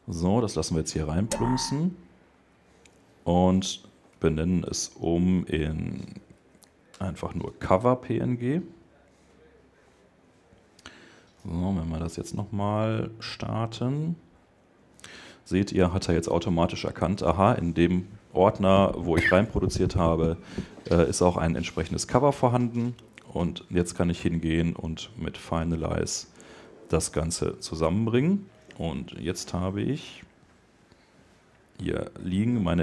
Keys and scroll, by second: 3.9 Left, 4.7 shift+Right, 6.1 shift+BackSpace, 6.7 Return, 28.6 super+Tab.